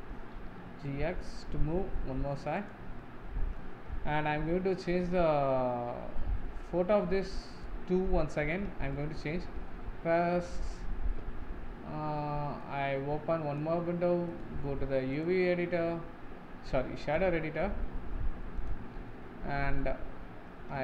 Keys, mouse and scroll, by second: 0.6-3.1 middle drag, 3.3-7.7 middle drag, 7.7 click, 8.5-9.0 scroll up 1, 9.0-12.9 shift+middle drag, 12.9-20.8 drag.